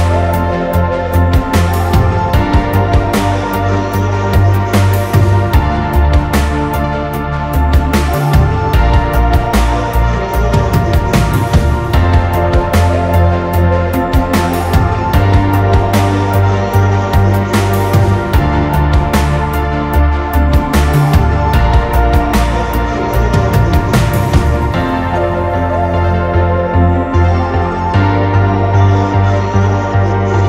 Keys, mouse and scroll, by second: 1.4 3, 3.3 scroll down 1, 3.5 middle click, 4.1 Escape, 4.3 scroll up 1, 4.4 middle click, 5.8-6.2 scroll down 1, 6.2 typing, 9.3 Return, 10.1 double click, 10.3 right click, 11.0 scroll down 1, 11.1 middle click, 11.6 scroll up 1, 12.3 typing, 13.2 alt+click, 13.7 space, 14.1 double click, 14.7 typing, 15.2 scroll down 1, 15.8 Escape, 16.0-17.2 scroll down 1, 17.2 scroll up 1, 18.1-19.4 scroll down 1, 19.8 Escape, 20.0 scroll up 1, 20.2-20.7 typing, 21.6 Return, 21.8 space, 22.1 scroll down 1, 24.0 Delete, 24.2 scroll up 1, 24.5 middle click, 24.8 scroll up 1, 26.5-27.0 scroll down 1, 29.7 Escape, 29.8 space, 30.1 scroll down 1, 30.3 middle click.